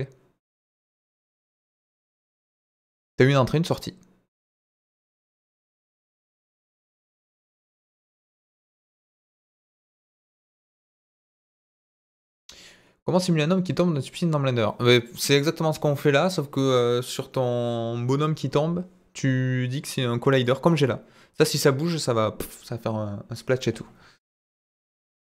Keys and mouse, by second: 5.4-6.6 drag.